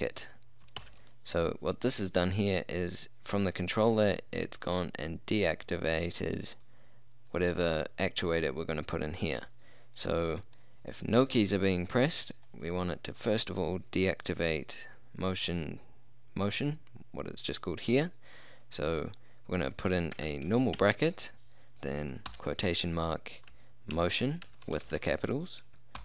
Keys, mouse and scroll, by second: 0.9 shift+9, 10.1-13.3 middle drag, 13.3-15.0 drag, 20.2 BackSpace, 20.8 shift+9, 22.4 shift+', 24.0-25.0 typing.